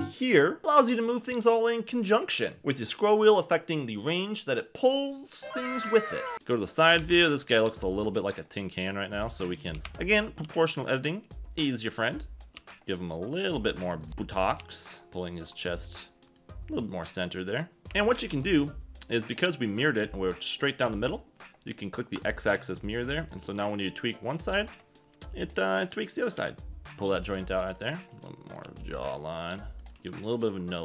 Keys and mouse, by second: 0.7 o, 1.5 s, 2.8 click, 2.9 g, 3.1 z, 4.3 s, 4.7 click, 4.9 g, 4.9 z, 6.4-7.6 typing, 8.4 click, 9.7 a, 9.8 g, 9.8 Escape, 10.4 g, 11.7 click, 12.5 g, 13.9 shift+middle click, 14.6 g, 15.0 g, 15.0 a, 15.0 b, 16.3 click, 17.3 g, 17.8 Escape, 17.8 Tab, 17.8 KP_1, 18.3 Tab, 23.3 click, 23.5 g, 24.7 Escape, 26.4 r, 26.9 g, 27.0 click, 27.6 click, 28.1 g, 28.5 click, 28.6 g, 29.9 g.